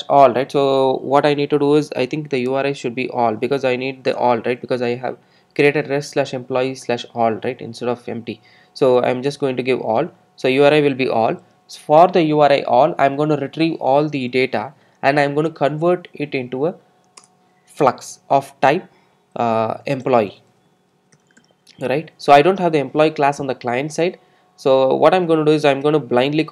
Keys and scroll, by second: 17.2 Return.